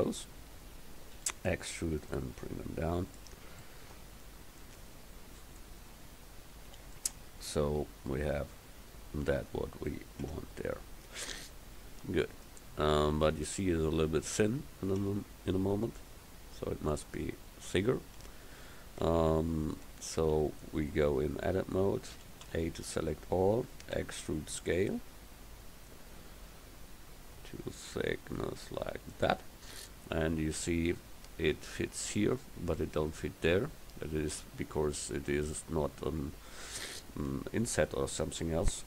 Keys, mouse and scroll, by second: 1.2 e, 2.2 click, 10.3 Tab, 15.1 Tab, 18.3 Tab, 19.9 Tab, 22.2 a, 22.5 a, 24.0 e.